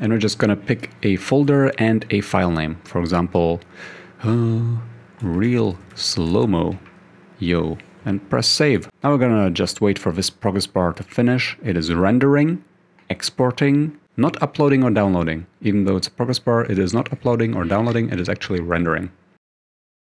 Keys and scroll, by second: 3.2 Return, 5.0-7.0 typing, 11.5 typing.